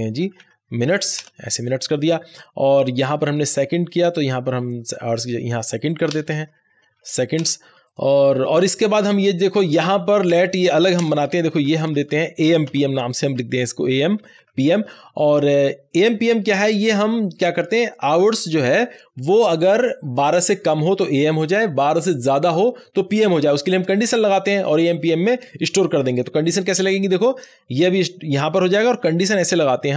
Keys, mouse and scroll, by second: 0.0-0.8 typing, 1.1 Return, 2.8 click, 3.4 s, 4.6-6.1 drag, 6.1 shift+s, 6.7 e, 7.3 Return, 7.7 ctrl+z, 7.8 click, 10.9 Return, 11.4 Right, 12.6-14.9 typing, 26.5 typing, 26.8-28.8 drag, 28.8 Delete.